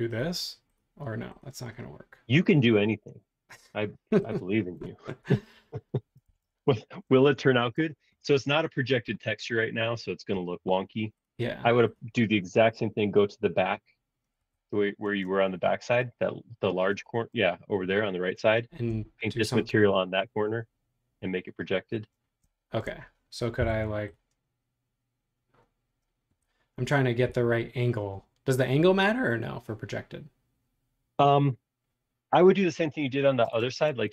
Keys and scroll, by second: 6.3 super+z, 9.0 space, 10.3 l, 14.4 Escape, 15.0 space, 15.5 super+z, 23.6 l, 26.3 Escape, 33.6 space.